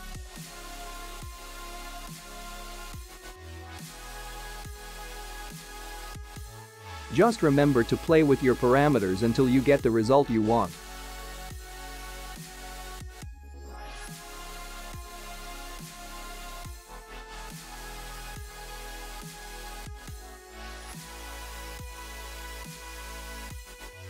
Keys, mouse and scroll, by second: 0.2 space, 1.5 click, 2.9 click, 4.0-6.1 scroll down 9, 7.7 click, 8.0-10.7 scroll down 10, 12.0 click, 15.4 click, 19.6 click, 20.7 space.